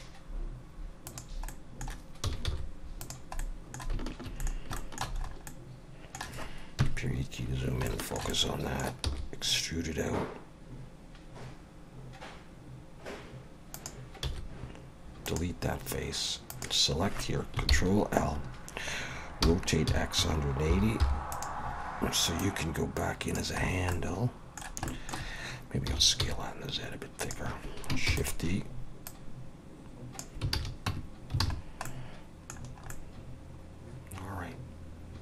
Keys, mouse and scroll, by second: 1.5 middle click, 2.2 s, 3.4 middle click, 4.4 middle click, 4.8 shift+middle click, 5.2 scroll up 3, 5.5 middle click, 6.8 KP_Decimal, 7.6 scroll down 1, 7.9 shift+middle click, 8.3 middle click, 9.1 e, 14.2 x, 16.5 click, 17.7 ctrl+l, 19.4 r, 22.4 click, 23.6 scroll down 4, 23.9 middle click, 24.9 shift+middle click, 25.9 s, 28.1 shift+d, 29.1 click, 30.5 alt+a, 30.9 Tab, 31.4 alt+a, 31.6 scroll down 3, 31.9 middle click, 32.6 scroll down 2, 32.9 middle click.